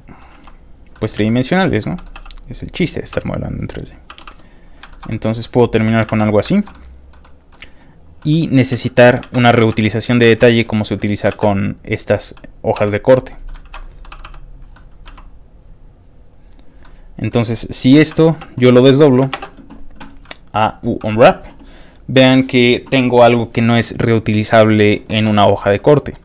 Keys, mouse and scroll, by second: 0.4-4.1 typing, 0.7 click, 0.9 middle click, 1.6 click, 1.8 middle click, 2.8 click, 3.4 click, 3.9 click, 4.7 click, 4.9 shift+middle click, 5.1 middle click, 5.9 click, 6.1 ctrl+shift+x, 6.2 middle click, 6.5 shift+middle click, 6.7 shift+middle click, 7.2 shift+middle click, 8.0 shift+click, 8.2 shift+middle click, 8.8 s, 9.0 click, 9.3 ctrl+z, 9.8 ctrl+x, 9.8 ctrl+middle click, 10.3 ctrl+z, 10.4 middle click, 10.9 click, 11.4 ctrl+x, 11.5 click, 12.3 click, 12.8 g, 13.0 ctrl+click, 13.4 ctrl+middle click, 13.7 ctrl+z, 14.2 r, 14.5 ctrl+click, 14.7 ctrl+middle click, 15.1 e, 16.5 ctrl+click, 16.8 middle click, 18.1 a, 19.0 click, 19.0 u, 19.4 ctrl+space, 20.2 ctrl+shift+middle click, 20.6 scroll up 3, 26.0 shift+middle click, 26.1 scroll up 1.